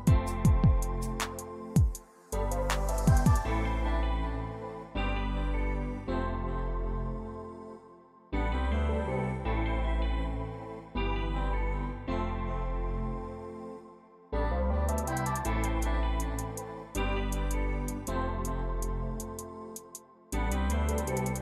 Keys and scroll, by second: 0.4-2.3 typing, 2.4 Return, 5.1-6.9 typing.